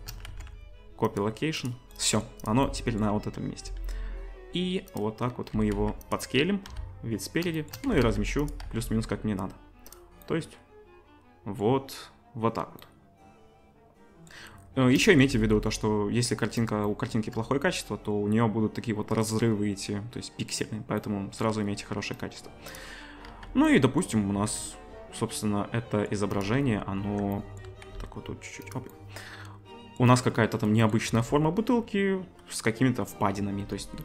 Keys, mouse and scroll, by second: 0.3 ctrl+c, 2.4 click, 3.6-4.9 right drag, 3.6 s, 5.5 g, 6.7 KP_1, 7.5 shift+right drag, 7.9 g, 8.6 z, 9.6 right click, 10.2-11.0 right drag, 15.5-16.6 right drag, 17.0 shift+middle click, 17.0 shift+right click, 17.3-34.0 right drag, 23.3 z, 24.4 Tab, 27.0 Tab, 27.9 s, 31.1 Tab, 33.6 ctrl+r.